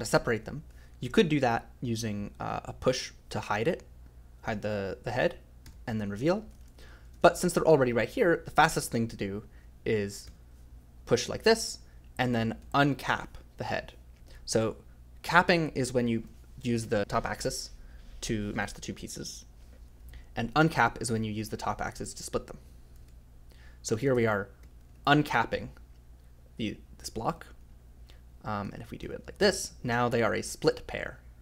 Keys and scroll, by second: 0.4 f, 2.9 o, 3.8 f, 5.6 k, 6.5 ctrl+z, 6.6 ctrl+z, 7.1 ctrl+z, 7.3 ctrl+z, 10.2 o, 12.6 f, 14.2 j, 15.4 f, 18.9 j, 22.0-25.5 typing, 28.4-29.9 typing.